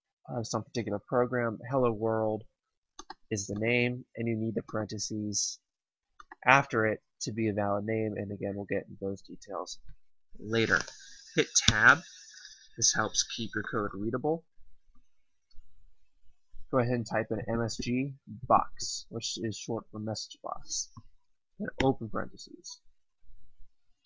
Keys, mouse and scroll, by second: 2.9 click, 11.6 Tab, 17.2-19.1 typing, 21.7 typing.